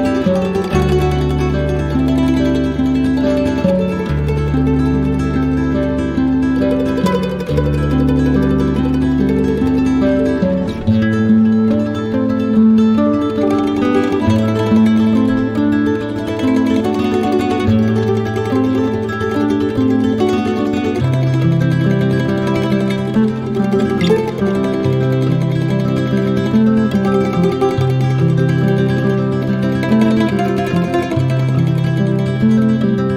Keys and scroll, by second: 3.1 ctrl+j, 11.8 z.